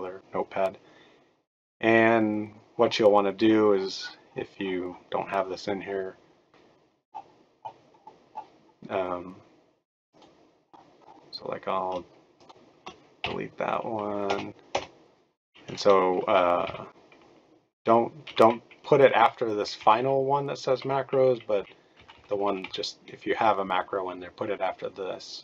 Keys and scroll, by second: 13.2 Delete, 14.2 BackSpace, 14.7 BackSpace, 16.6 Down, 17.8 Down, 20.0 BackSpace, 22.0 Right, 22.1 Right, 22.3 Right, 22.4 Right, 22.6 Right.